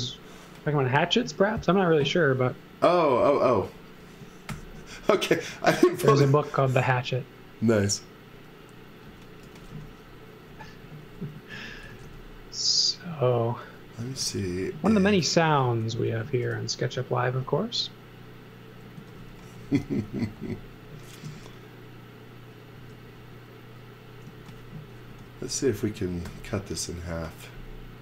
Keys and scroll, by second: 4.5 shift+5, 5.3 z, 9.4-12.5 typing, 13.7-14.7 typing, 15.9 l, 16.4 space, 17.4 space, 18.7-21.2 typing, 22.7-25.1 typing, 26.3 l.